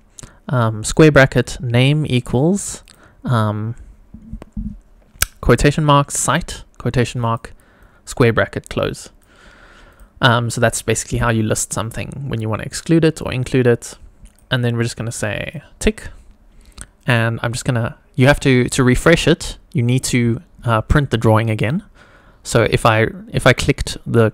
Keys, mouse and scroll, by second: 15.4 click, 17.0 click, 20.0 click, 21.6 click, 24.2 click.